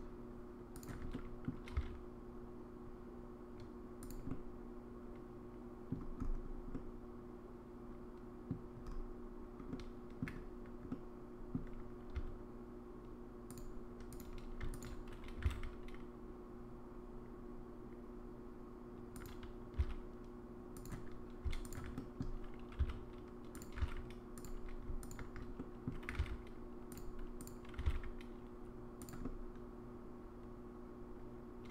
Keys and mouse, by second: 0.8 alt+click, 1.1 middle click, 1.7 s, 4.3-5.9 middle drag, 6.7-8.5 middle drag, 9.7 middle click, 10.9 middle click, 12.1 s, 14.7 alt+click, 15.4 g, 19.8 s, 21.7 click, 22.0 middle click, 23.7 g, 25.0 alt+click, 25.6 middle click, 26.1 g, 27.8 g, 29.2-31.7 middle drag.